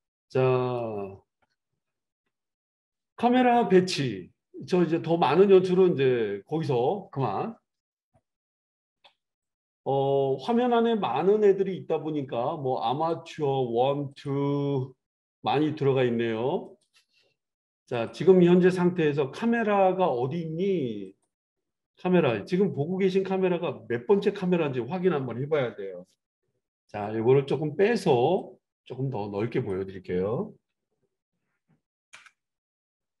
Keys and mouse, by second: 9.4-13.3 drag, 14.1 click, 17.9 click, 21.0 click, 21.4-28.3 middle drag, 28.3-33.2 drag.